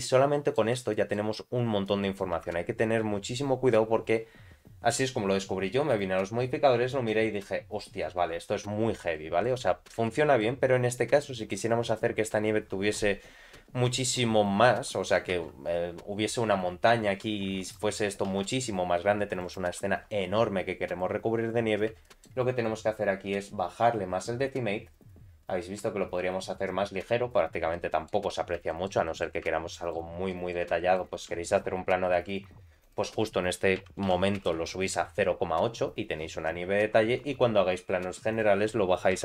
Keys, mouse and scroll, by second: 0.9 shift+middle click, 1.5 scroll down 2, 1.8 middle click, 2.4 Tab, 6.0 click, 7.6 click, 9.1 middle click, 9.6-10.0 scroll up 2, 10.0 shift+middle click, 10.8-11.2 scroll down 2, 11.2 middle click, 11.8 scroll down 1, 13.4-14.2 scroll down 5, 14.7 scroll down 1, 15.3 shift+a, 17.6 click, 18.3 s, 20.0 scroll up 2, 20.9 click, 21.5-22.0 scroll up 3, 22.0 shift+middle click, 23.9-27.0 drag, 27.3-27.7 scroll down 3, 27.7 middle click, 28.3 scroll up 1, 28.7 shift+middle click, 29.0 middle click, 29.7 middle click, 30.3 middle click, 30.8 shift+middle click, 31.7 scroll up 2, 32.8-35.6 drag, 36.8-37.2 scroll down 2, 38.3-39.2 drag, 38.3 scroll down 2.